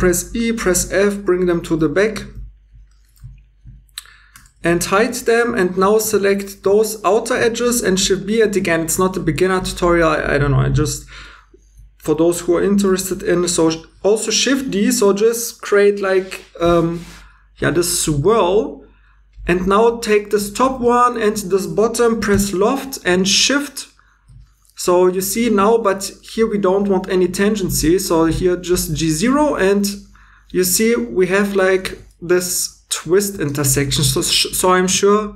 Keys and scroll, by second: 2.3 2, 4.3 h, 5.1 2, 7.7 shift+b, 12.9 d, 18.5 2, 23.4 l.